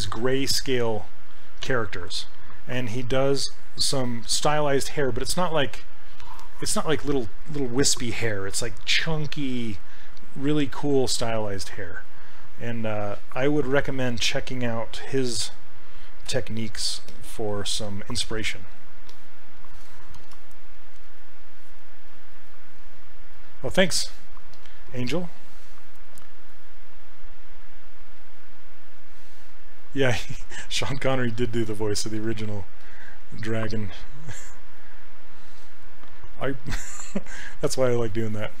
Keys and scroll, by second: 15.5 q, 16.3 q, 17.6 q, 20.2 shift+f, 36.3 s.